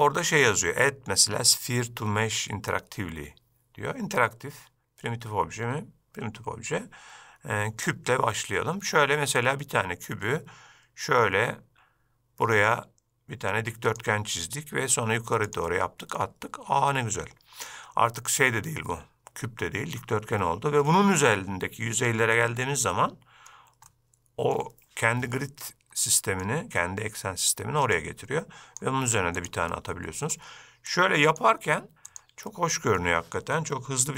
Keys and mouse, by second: 10.2-15.7 drag, 16.3-20.1 middle drag, 21.0-21.4 middle drag, 23.0-23.6 middle drag, 24.0-24.6 middle drag, 26.1-26.5 middle drag, 28.1-29.6 drag, 29.8-30.4 middle drag, 31.0-32.3 drag, 32.6-33.1 middle drag.